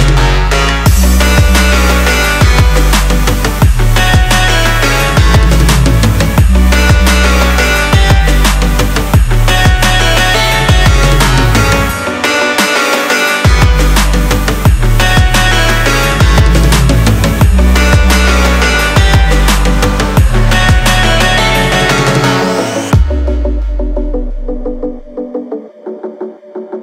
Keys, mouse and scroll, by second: 0.6 click, 2.4 x, 5.3 click, 9.1-15.5 drag, 17.8 click, 24.4 click, 26.1-26.8 drag.